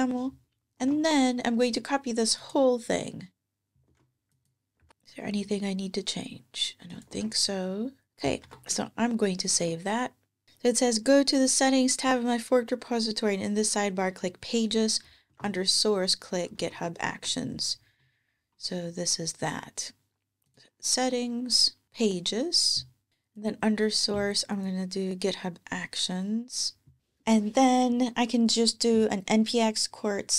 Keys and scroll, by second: 0.6 super+Tab, 3.7 super+Tab, 4.6 super+v, 4.9 super+Tab, 6.9 super+Tab, 8.1 super+Tab, 8.2 super+s, 9.3 super+Tab, 15.1 ctrl+Tab, 16.4 ctrl+Tab, 23.1 ctrl+Tab, 27.0 ctrl+Tab.